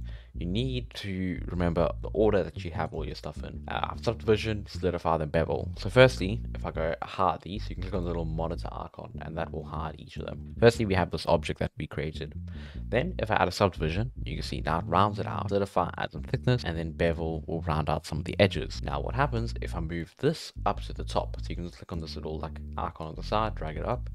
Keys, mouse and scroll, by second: 0.0-2.0 drag, 3.5-4.9 scroll up 10, 6.2-7.0 scroll down 7, 7.9 click, 9.2-10.1 scroll up 2, 10.1 click, 10.3 scroll up 1, 10.4 middle click, 10.5 n, 13.5 click, 15.9 click, 16.6-17.0 scroll down 1, 17.0 click, 20.0-21.9 drag, 23.0-23.9 drag.